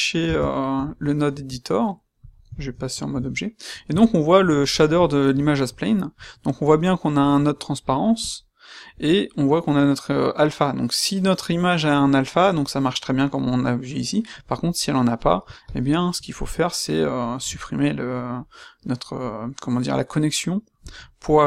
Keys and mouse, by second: 1.4 space.